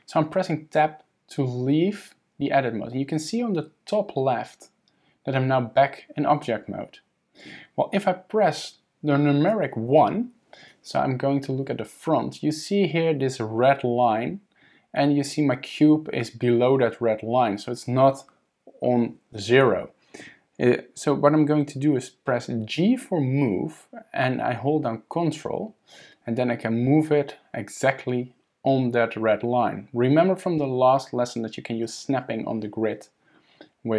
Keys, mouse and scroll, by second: 9.9 KP_1, 22.8 g.